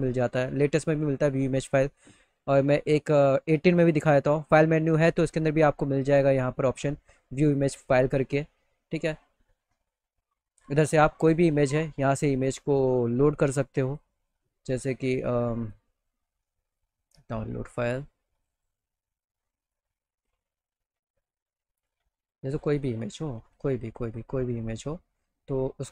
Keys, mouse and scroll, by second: 2.4 click, 3.6 click, 7.8 click, 10.8 click, 13.2 click, 13.4 click, 15.2 click, 16.3 click, 17.9 click, 18.1 click, 19.2 click, 19.8 click, 21.4 click, 22.1 click, 22.2 right click, 23.1 click, 23.6 click.